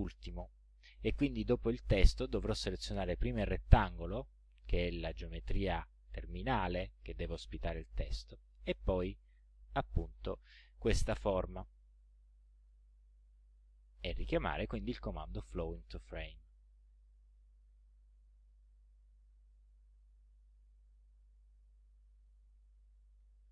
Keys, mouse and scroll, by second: 3.7 shift+click, 9.3 shift+click, 12.6 click, 15.4 click, 18.2 click, 19.6-20.7 drag, 21.6 click.